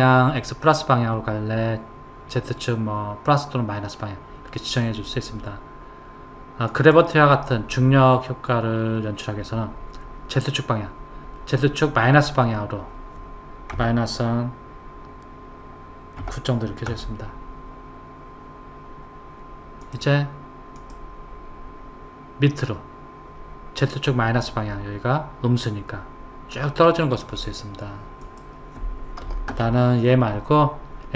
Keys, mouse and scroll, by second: 6.7 click, 19.8 click, 20.8 click, 28.2 click.